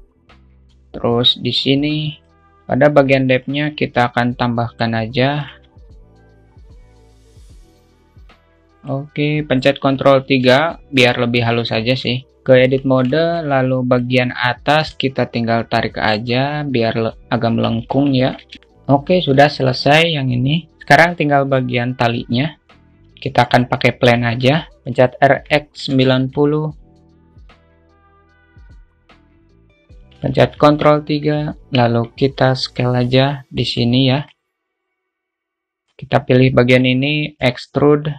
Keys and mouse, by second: 0.9-2.0 drag, 3.9-5.4 drag, 5.9 alt+middle click, 7.2 click, 8.5 click, 10.8 ctrl+3, 13.0 Tab, 13.5 alt+shift+middle click, 14.3 click, 15.9 click, 18.1 Tab, 19.8 alt+shift+middle click, 22.3 shift+a, 24.3 s, 25.3 r, 27.1 click, 27.9-29.0 drag, 29.1-30.0 drag, 30.7 ctrl+3, 31.2-31.6 alt+middle drag, 31.9 Tab, 32.6 alt+z, 33.3 click, 34.5 alt+middle click, 36.1-37.3 drag, 37.6 e.